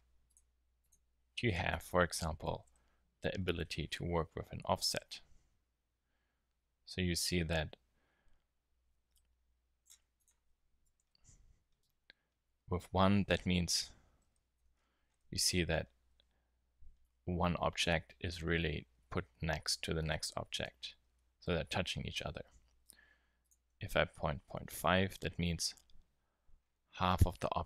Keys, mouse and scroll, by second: 13.7 middle click, 14.0 z, 21.1-23.4 middle drag, 26.6-27.4 middle drag, 27.5 z.